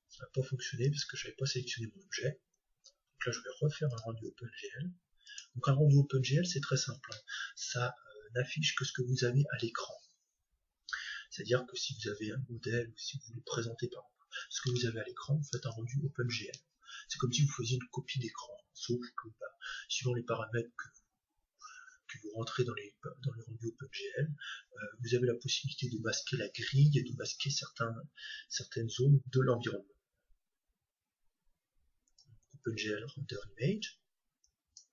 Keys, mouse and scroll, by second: 0.8-3.9 right drag, 3.9-7.2 drag.